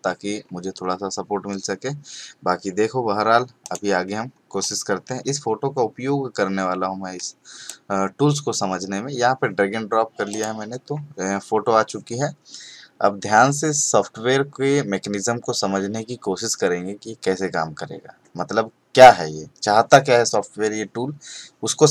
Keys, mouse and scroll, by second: 3.6 click, 10.3 click.